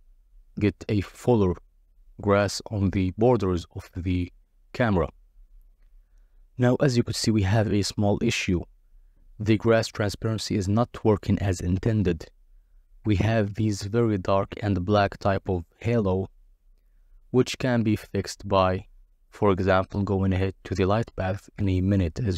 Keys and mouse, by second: 0.7 click, 1.5 middle click, 5.3 click, 5.7 click, 6.9 click, 7.3 click, 10.0 click, 17.1 click, 18.4-19.3 drag, 19.3-20.6 middle drag, 20.6 click, 20.7 middle click, 21.0-22.3 drag.